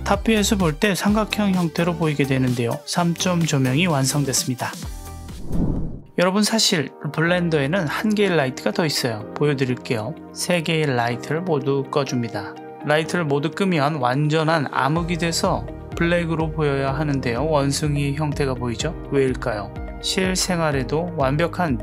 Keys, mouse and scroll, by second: 0.1 click, 1.8-4.4 middle drag, 5.4 click, 10.4 click, 11.0 click, 12.3 click.